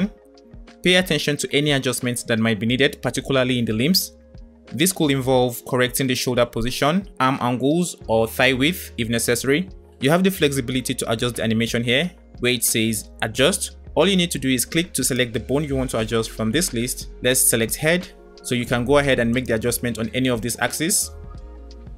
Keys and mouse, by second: 2.2 middle click, 2.4 click, 3.3 space, 4.3 space, 15.1-17.7 drag, 19.3 click.